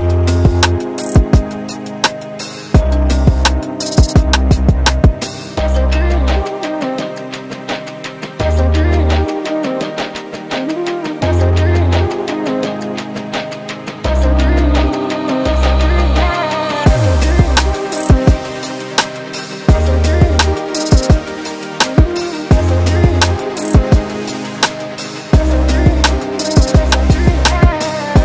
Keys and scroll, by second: 0.3 q, 5.2 space, 6.0 m, 11.8 space, 14.8 h, 15.9 s, 22.6 space, 23.7 m.